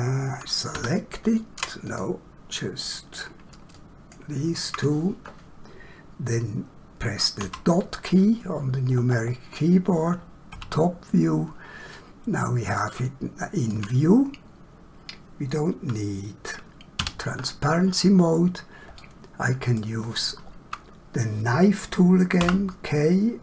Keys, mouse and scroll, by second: 1.8 click, 3.7 shift+click, 8.9 scroll down 1, 11.9 shift+middle click, 12.8 shift+middle click, 16.9 <, 18.1 scroll up 1, 19.0 shift+middle click, 22.4 k.